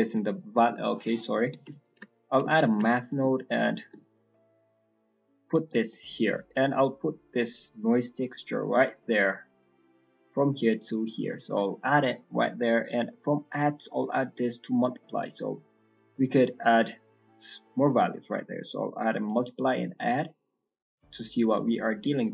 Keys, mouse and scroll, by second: 1.8 ctrl+right click, 2.4 ctrl+right click, 3.3 ctrl+right click, 3.4 ctrl+right click, 4.6 ctrl+right click, 4.6 click, 5.6 scroll down 3, 5.8 middle click, 6.3 scroll down 2, 6.5 middle click, 7.3 middle click, 9.5 click, 10.7 click, 11.3 middle click, 11.5-12.8 scroll up 12, 12.2 middle click, 12.8 click, 13.1 click, 15.5 scroll down 3, 15.6 middle click, 15.9-16.5 scroll up 3, 16.5 middle click, 17.9 click, 19.5-19.9 scroll down 3, 19.7 middle click, 19.9-20.3 scroll up 2, 20.3 middle click, 20.8-21.1 scroll down 2, 21.1 middle click, 22.2 click.